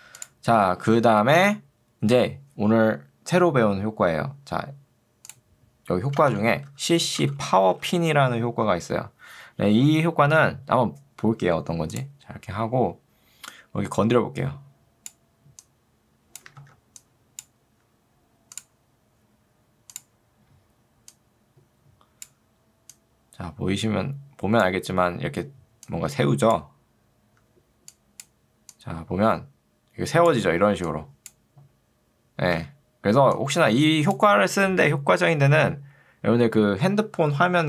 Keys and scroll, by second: 6.3 ctrl+space, 6.7-8.2 typing, 16.7 ctrl+z, 30.7 ctrl+2, 32.7 Escape.